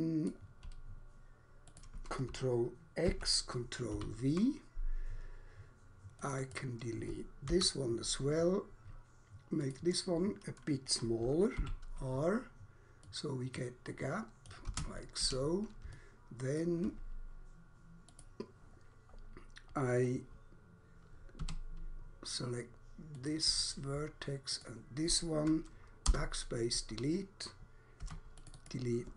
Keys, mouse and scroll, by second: 1.7 click, 3.1 ctrl+x, 3.9 ctrl+v, 6.2 click, 6.4 click, 7.2 Delete, 9.6 click, 11.6 r, 13.1 click, 14.6 click, 14.7 space, 15.2 Escape, 15.9 alt+click, 18.1 click, 19.2 scroll up 1, 19.7 scroll down 1, 20.1-20.4 scroll up 1, 21.4 1, 23.2 click, 24.6 shift+click, 26.1 BackSpace, 28.1 3, 28.2 click, 28.6 click.